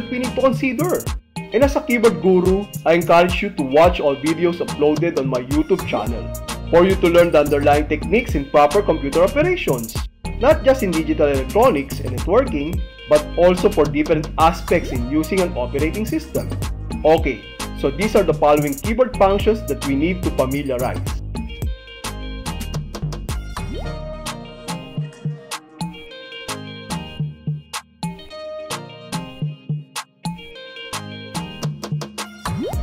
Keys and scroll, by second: 25.2 ctrl+shift+Escape.